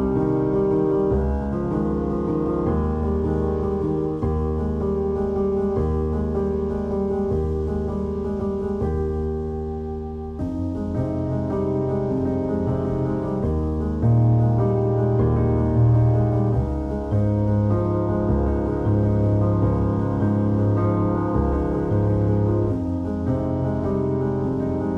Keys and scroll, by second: 0.2 ctrl+x, 0.4 2, 2.8 ctrl+s, 3.8 ctrl+2, 7.4 Tab, 7.8 2, 8.2 shift+q, 9.1 ctrl+b, 10.6 3, 10.9 Tab, 11.6 alt+shift+z, 15.1 Tab, 16.8 ctrl+r, 18.5 ctrl+r, 18.7 1, 21.1 `, 22.4 `, 22.4 s, 22.5 shift+z, 23.9 Tab, 24.4 alt+shift+z, 24.6 Tab.